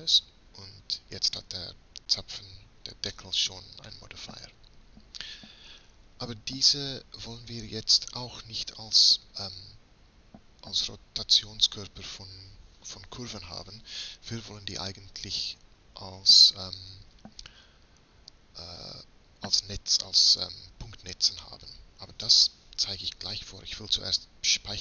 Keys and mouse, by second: 3.3-6.2 middle drag.